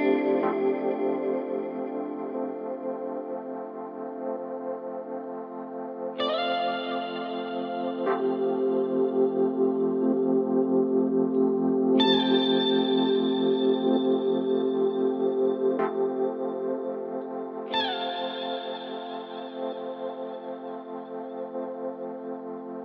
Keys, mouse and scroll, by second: 3.6 click, 10.2-11.0 scroll down 1, 11.0-12.4 scroll down 3, 12.4-13.4 scroll down 1, 14.9-16.4 drag, 16.4-17.7 middle drag, 17.7 click, 20.2-21.3 drag, 21.9-22.8 middle drag.